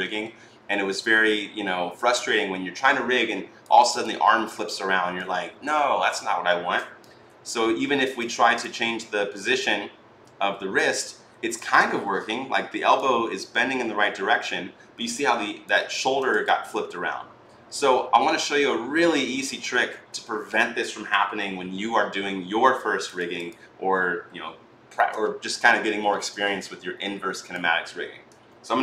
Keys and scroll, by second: 7.1 e, 11.8 ctrl+z.